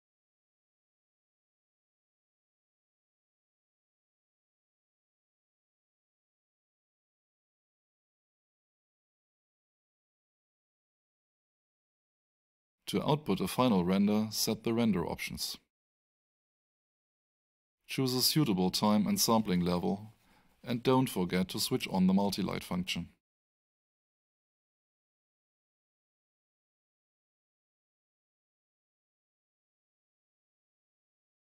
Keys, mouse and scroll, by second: 14.9 scroll up 1, 17.3 click, 22.8-23.7 typing, 24.1 Tab, 26.6-27.5 typing, 28.9 6, 29.4 click.